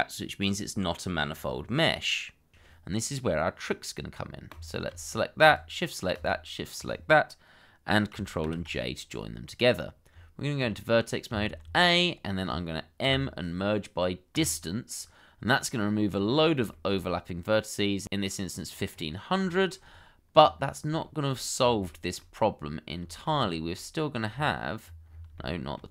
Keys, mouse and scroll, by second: 0.0 middle click, 1.4 shift+middle click, 2.1 scroll down 1, 5.4 shift+click, 8.4 ctrl+j, 9.5-10.1 scroll up 1, 10.1 Tab, 11.3 a, 11.8 shift+middle click, 13.0 m, 16.0-16.6 scroll up 1, 16.7 shift+middle click, 18.8 scroll up 1, 19.5 shift+middle click, 19.8-20.3 scroll up 1, 21.0 shift+middle click, 21.5 scroll down 1, 21.9 shift+middle click, 23.1 shift+middle click, 23.3-23.9 scroll up 1, 24.0 shift+middle click, 24.3-24.7 scroll up 1, 24.7-25.1 scroll down 1, 25.3 shift+middle click.